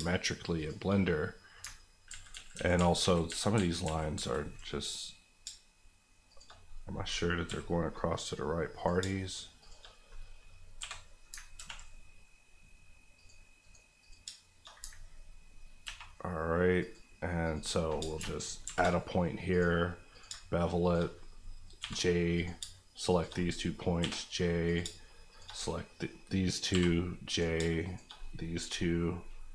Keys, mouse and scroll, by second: 1.0 click, 1.7 ctrl+click, 2.1 ctrl+z, 4.6 z, 4.9 click, 5.4 shift+click, 6.6 click, 7.4 j, 8.7 click, 9.0 shift+click, 9.9 click, 10.8 j, 11.4 ctrl+j, 11.5 ctrl+r, 13.1 click, 13.6 right click, 14.0 click, 14.2 shift+click, 14.8 ctrl+click, 15.8 ctrl+r, 16.8 click, 18.0 shift+click, 18.2 ctrl+shift+click, 18.6 ctrl+shift+b, 19.5 click, 20.3 shift+click, 21.1 click, 21.8 j, 22.3 click, 22.6 shift+click, 23.4 click, 24.0 j, 24.6 click, 24.8 shift+click, 25.6 click, 26.7 j, 27.3 click, 27.5 shift+click, 28.2 click.